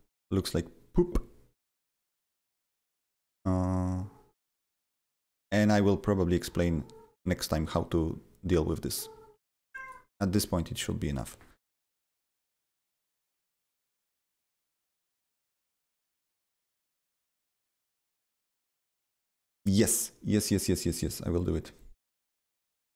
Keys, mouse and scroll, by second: 2.4 scroll up 1, 2.8-4.4 scroll down 2, 7.2-7.6 scroll up 3, 7.6 scroll down 2, 9.8 click, 11.1 click.